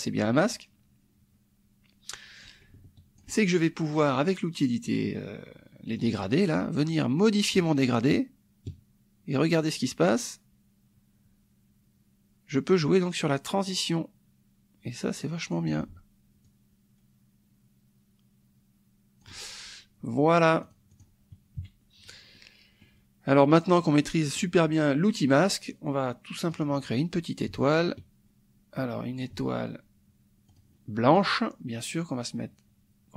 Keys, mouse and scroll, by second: 2.4 click, 6.0 click, 7.6-15.7 ctrl+drag, 16.4-19.4 ctrl+drag, 20.6 click, 21.6 KP_Subtract, 22.3 click, 23.7 click, 24.2 click, 26.5 click, 27.4-29.4 ctrl+drag, 30.5 click, 31.1-33.1 drag.